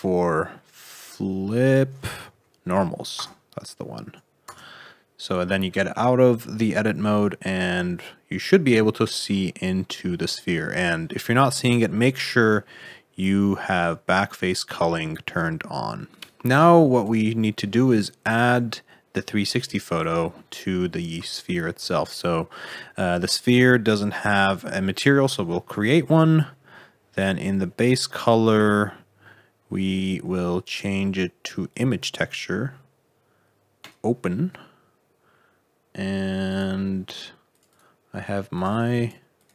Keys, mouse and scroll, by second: 4.4 Tab, 6.5 middle click, 9.8 middle click, 11.0 middle click, 12.2 click, 16.2 scroll down 2, 16.3 middle click, 16.9 click, 17.8 click, 18.2 click, 19.8 click, 20.9-21.3 scroll down 1, 21.3 shift+middle click.